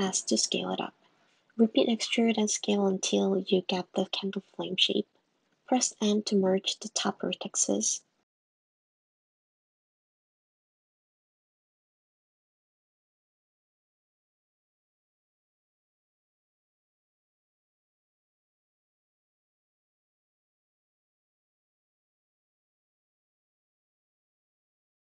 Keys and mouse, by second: 0.4 s, 1.2 e, 1.9 s, 2.9 e, 3.4 s, 5.6 m, 7.1 g, 7.5 m, 11.2 click, 11.8 click, 12.5 click, 16.9 middle click, 17.4 middle click, 17.6 middle click, 18.5 g, 21.8 Tab, 22.4 click, 22.7 click, 24.4 click.